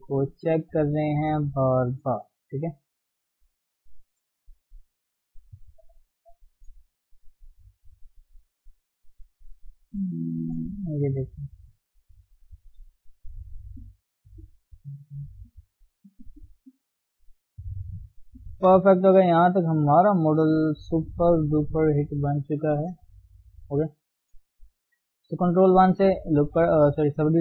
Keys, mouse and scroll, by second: 0.9 click, 1.2 g, 2.5 click, 2.8 g, 3.4 click, 3.6 g, 4.3 click, 4.7 g, 5.8 click, 6.2 g, 7.0 click, 7.3 click, 7.6 g, 8.0-11.1 middle drag, 11.1 click, 11.4-12.8 middle drag, 12.8 g, 14.6 g, 15.3 click, 15.9 g, 16.8 click, 17.0 g, 17.7 middle click, 18.2-18.5 scroll down 1, 18.5 KP_1, 19.2 Tab, 20.2 ctrl+shift+s, 21.7 ctrl+shift+s, 22.9 ctrl+shift+s, 23.3 ctrl+shift+s, 23.8 shift+middle click, 23.9-24.2 scroll up 1, 24.2-24.9 scroll down 1, 24.9-27.4 scroll up 1.